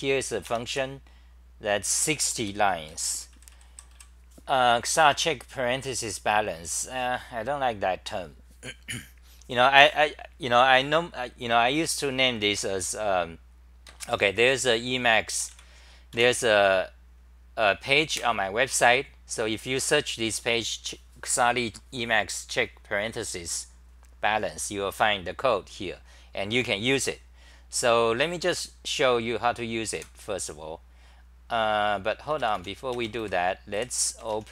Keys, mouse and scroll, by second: 2.4-3.9 typing, 11.5-14.6 typing, 13.9 ctrl+g, 18.1 super+r, 30.0 super+w, 33.8 w.